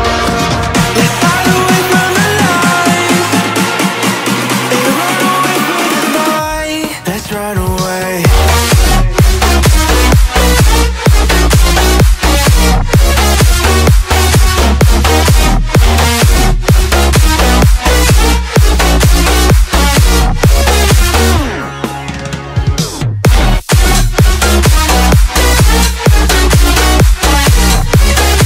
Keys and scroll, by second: 4.3 Return, 10.1 Caps_Lock, 12.4 v, 17.9 space.